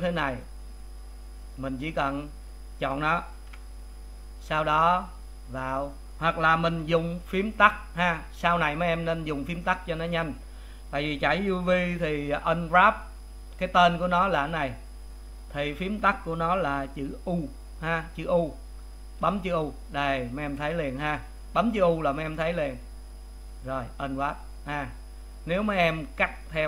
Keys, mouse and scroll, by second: 0.2 click, 2.9 click, 3.5 a, 25.4-25.7 scroll up 3, 25.7-26.6 middle drag.